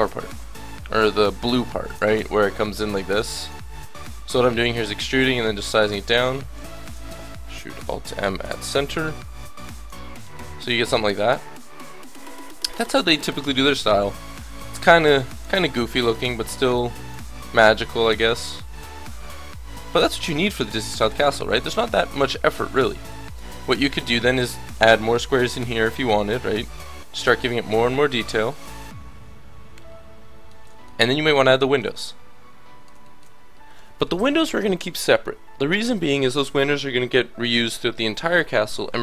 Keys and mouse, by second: 1.5 e, 3.4 s, 4.6 e, 5.2 s, 6.6 e, 7.7 alt+m, 9.7-12.6 drag, 10.2 Tab, 14.0 KP_1, 14.3 Tab, 14.8 a, 14.9 b, 15.6 s, 16.8-19.0 drag, 17.6 Tab, 23.1 Tab, 23.6 a, 36.6-39.0 middle drag.